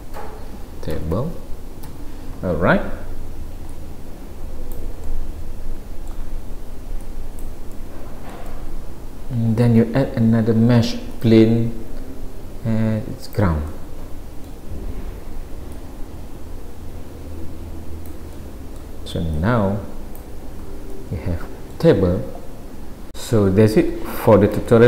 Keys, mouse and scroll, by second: 3.7 click, 5.1 middle click, 7.1 click, 7.8 middle click, 9.6 shift+a, 11.8 s, 13.7 middle click, 15.8 click, 18.4 middle click, 19.4 click, 21.0 middle click, 23.1 middle click, 23.1-23.5 scroll down 1, 24.7 shift+middle click.